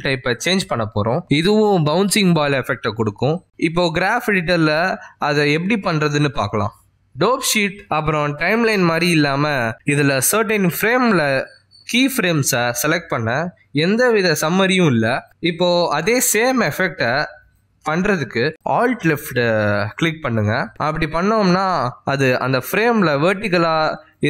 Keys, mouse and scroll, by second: 5.7 click, 7.7 space, 8.8 space, 9.9 click, 11.2 ctrl+Tab, 12.7 click, 13.5 click, 14.0 click, 14.5 click, 16.5 click, 17.2 a, 17.9 ctrl+Tab, 21.8 alt+click.